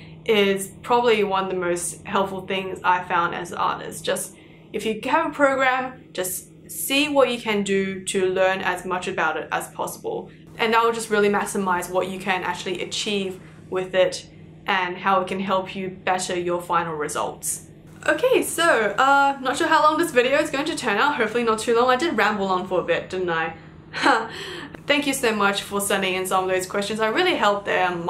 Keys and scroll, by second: 13.4 ctrl+z.